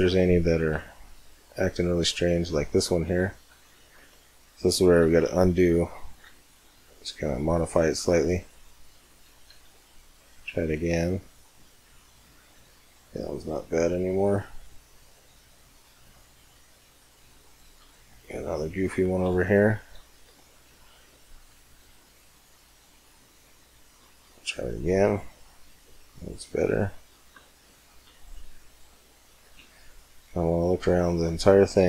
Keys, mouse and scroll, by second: 0.1-4.2 middle drag, 4.8 ctrl+z, 5.3-7.4 middle drag, 6.0 c, 8.5-10.2 right drag, 9.7 w, 11.9-14.6 middle drag, 17.4-20.1 middle drag, 20.1 ctrl+z, 21.0 c, 23.7 w, 25.5 middle click, 26.1-31.5 middle drag.